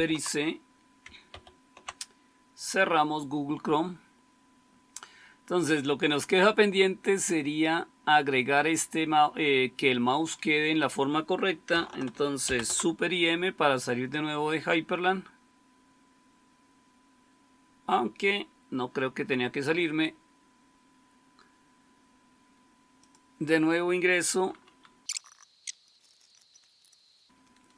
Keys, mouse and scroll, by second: 1.2 super+c, 12.4 super+m, 24.8-25.9 typing.